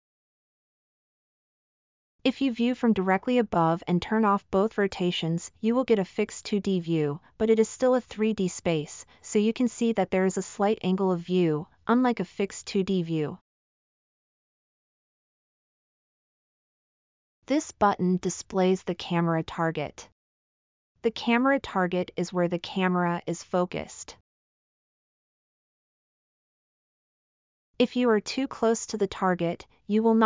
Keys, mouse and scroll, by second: 9.1 scroll down 1, 10.1 middle click, 10.4 scroll down 1, 10.6 scroll down 1, 10.6 scroll down 1, 10.9 scroll down 1, 13.6-17.2 middle drag, 23.5-26.2 middle drag, 27.5-27.8 scroll, 28.2 scroll, 28.7 scroll, 29.7 scroll, 30.0 middle click, 30.0 scroll.